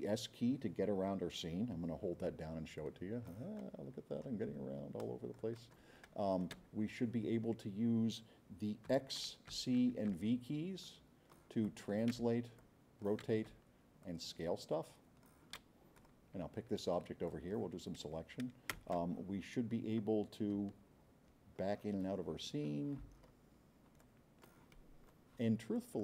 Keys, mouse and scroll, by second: 2.8-4.2 drag, 4.2 right click, 4.6 middle click, 5.0 click, 5.5 right click, 6.0 right click, 8.9 x, 9.5 c, 10.1 v, 10.8-11.3 drag, 11.6-11.9 drag, 12.3 c, 12.6 click, 13.4 x, 14.0-15.4 drag, 15.9 click, 17.3-17.6 drag, 18.8 space, 20.6 s, 21.3 middle click, 22.0 middle click, 22.1 middle click, 22.5 middle click, 23.1 middle drag, 24.0 click, 24.7-25.1 right drag, 25.7 click.